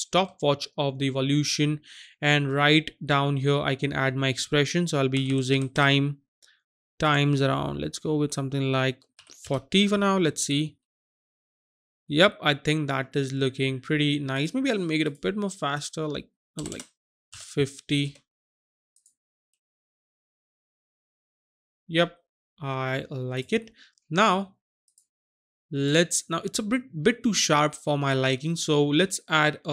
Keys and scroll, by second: 5.5 typing, 9.2 KP_4, 9.6 KP_0, 16.6 BackSpace, 16.8 BackSpace, 17.2 KP_5, 18.0 KP_0.